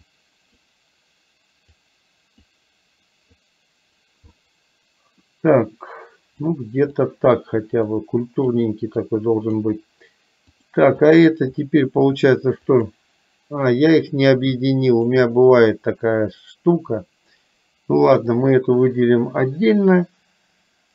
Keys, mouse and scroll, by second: 0.1 click, 1.8 click, 3.5 click, 4.4 middle click, 6.4 click, 8.0 click, 9.1 click, 10.6 click, 12.8 click, 14.9 shift+click, 18.4 click.